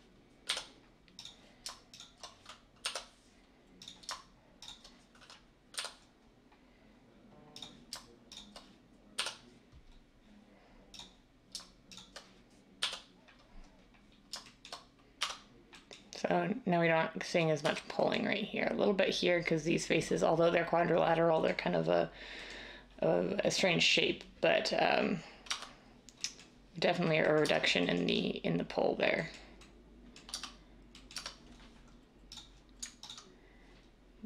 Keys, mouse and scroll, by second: 0.4 j, 5.7 j, 9.1 j, 12.7 j, 15.1 Tab, 17.6 Tab, 25.4 Tab, 27.4 Tab, 30.3 Tab, 31.1 Tab.